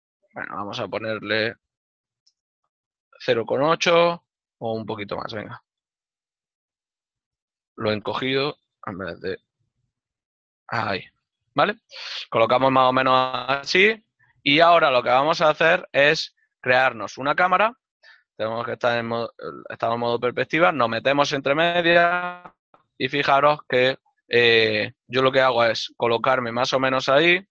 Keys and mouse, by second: 2.5 Return, 3.1 middle click, 6.1 Return, 9.4 KP_Decimal, 10.0 Return, 10.8 middle click, 15.4 click, 19.1 ctrl+middle click, 21.3 shift+middle click.